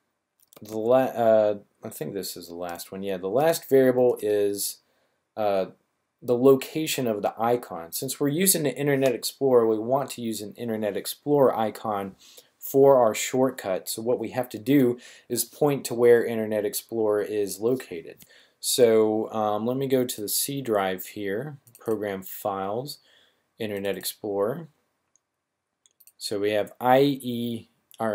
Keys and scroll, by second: 0.5-1.0 typing, 3.7 =.